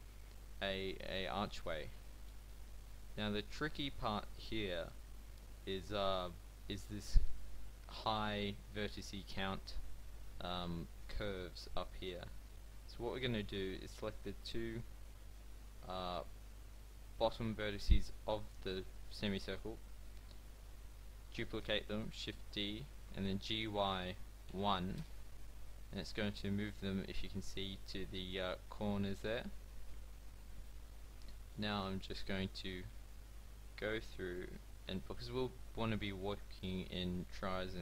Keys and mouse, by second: 10.6 click, 12.5 click, 14.9 click, 21.3 shift+d, 23.0 g, 26.4 click, 31.1 a, 31.5-32.7 drag, 33.4 f, 36.2 f.